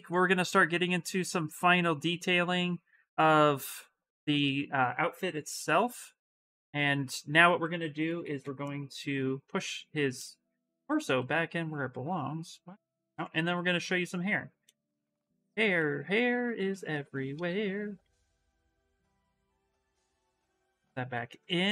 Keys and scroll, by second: 5.2 ctrl+n, 6.9 s, 7.8 b, 8.2 v, 8.9 s, 10.4 s, 12.9 x, 14.9 shift+d, 15.1 shift+d, 15.2 shift+d, 15.5 shift+d.